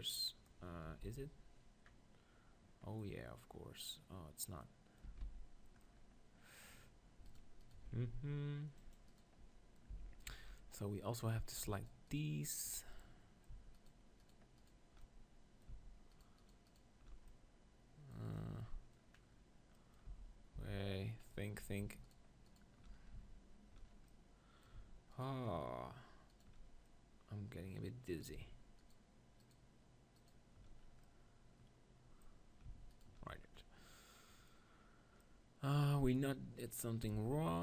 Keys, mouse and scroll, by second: 0.9 KP_1, 1.0 z, 1.9-4.1 middle drag, 4.6-7.3 middle drag, 5.0 Tab, 5.2 z, 7.3-8.7 right drag, 7.9 ctrl+r, 9.9 z, 10.7 middle click, 12.9-17.6 middle drag, 20.1 z, 20.5 z, 22.0-24.4 middle drag, 25.1-26.7 drag, 25.1-26.7 middle drag, 26.7 right click, 26.9-28.1 drag, 26.9-28.7 middle drag, 30.8-32.7 middle drag, 31.1-32.1 drag, 32.9 right click, 33.3-35.3 middle drag, 33.6-34.7 drag, 37.2 g.